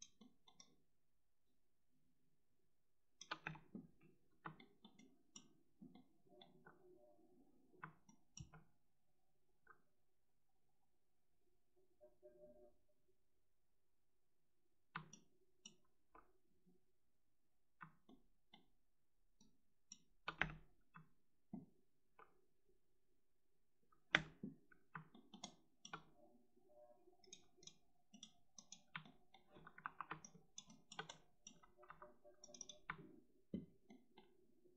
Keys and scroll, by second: 3.3 space, 20.3 space, 24.0 space, 29.7 5, 31.7 1.